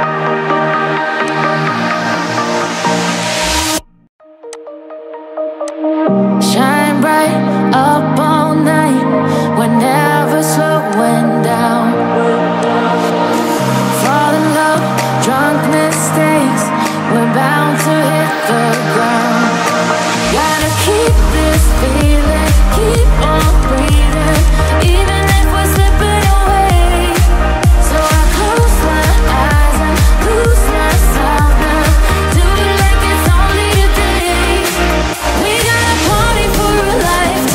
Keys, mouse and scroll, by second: 0.1 5, 3.3 click, 4.6 click, 5.7 click, 6.5 shift+a, 7.8 Tab, 8.6 shift+a, 12.7 click, 13.6 click, 14.9 click, 18.5 g, 21.9 click, 23.3 click, 23.5 click, 23.7-26.1 click, 24.0 click, 24.1 click, 28.1 click, 28.3-29.2 click, 28.6 click, 28.7 click, 29.4 click, 30.3 g, 33.3 Tab, 34.0-35.1 BackSpace.